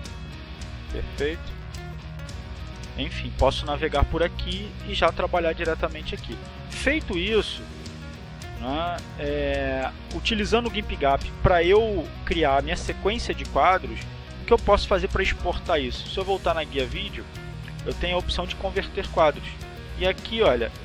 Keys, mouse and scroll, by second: 1.3 click, 8.9 click, 16.6 click, 18.9 click.